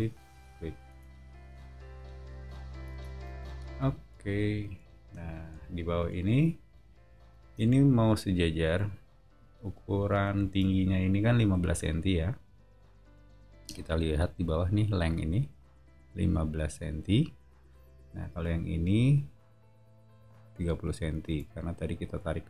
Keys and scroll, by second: 0.9 space, 2.3 Escape, 2.4 Escape, 2.9 space, 3.5 o, 7.4 space, 9.9 o, 11.5 t, 18.3 Escape, 21.2 space.